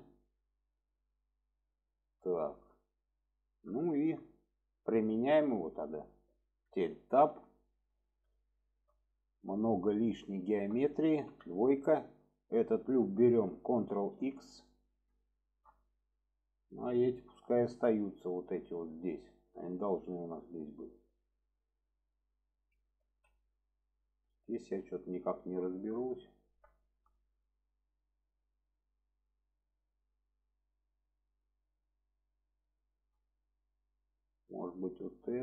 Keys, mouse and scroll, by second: 2.1-2.9 middle drag, 4.8-5.8 drag, 7.3 Tab, 7.7-8.1 middle drag, 8.6 middle drag, 9.8 middle click, 10.4 shift+middle click, 12.7 alt+shift+click, 14.1 ctrl+x, 14.7 middle click, 15.3 shift+middle click, 16.1 middle click, 17.5 middle click, 19.3 shift+middle drag, 19.7 middle drag, 20.5 middle click, 22.0 middle click, 22.5 alt+z, 23.0 alt+z, 23.4-24.0 middle drag, 24.5-26.5 middle drag, 26.7 shift+middle drag, 31.3-32.2 middle drag, 32.8 shift+middle drag, 34.5 click.